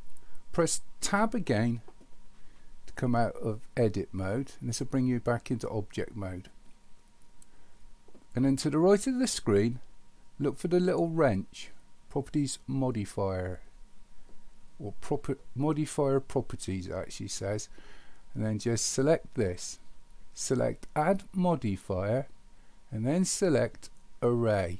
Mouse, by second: 19.4 click.